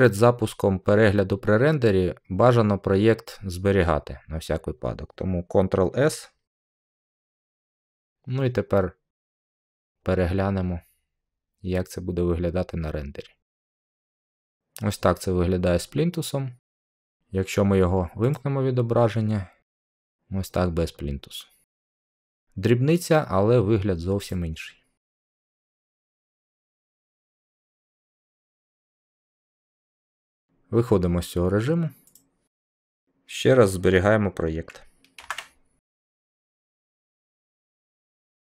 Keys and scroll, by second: 6.4 ctrl+s, 35.1 ctrl+s.